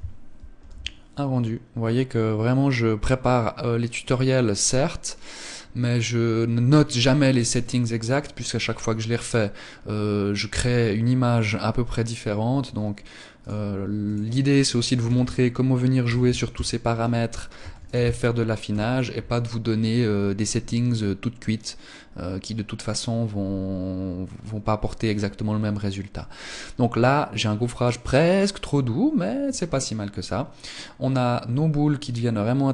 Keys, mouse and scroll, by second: 12.1 Escape, 13.2 click, 13.8 click, 17.4 ctrl+s.